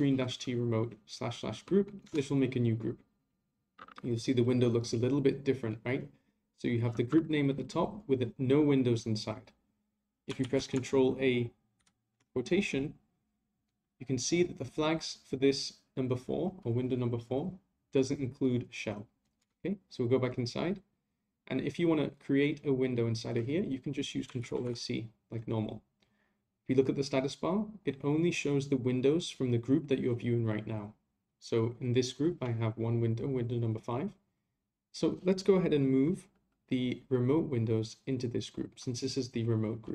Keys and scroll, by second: 10.4 ctrl+a, 24.4 a.